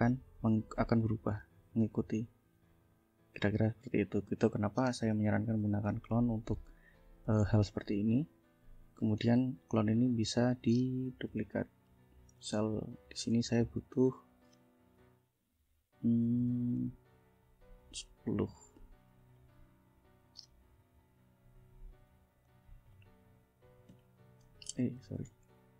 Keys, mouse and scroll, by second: 1.3 click, 3.4 ctrl+z, 4.3 ctrl+z, 5.5 F1, 5.8 click, 6.4 click, 7.0 shift+click, 7.7 ctrl+shift+click, 8.4 ctrl+click, 8.9 ctrl+click, 10.0 ctrl+click, 11.2 ctrl+d, 11.4 ctrl+click, 12.6 ctrl+shift+click, 13.0 ctrl+shift+click, 13.7 shift+click, 14.7 ctrl+shift+a, 16.8-18.1 drag, 18.3 click, 19.3 click, 20.6 ctrl+d, 21.0 ctrl+click, 21.8 ctrl+click, 22.4 ctrl+shift+click, 23.9 ctrl+shift+Down, 25.0 ctrl+shift+z, 25.5 ctrl+shift+Up.